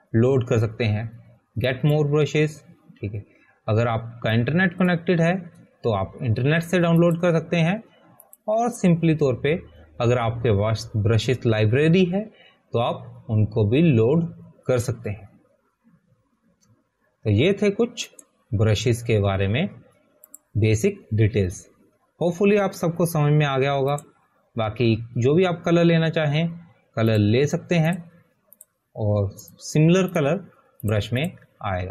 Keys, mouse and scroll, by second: 6.9 click, 9.0 click, 9.7 space, 11.7 click, 22.7 click, 24.9 click, 28.7 click.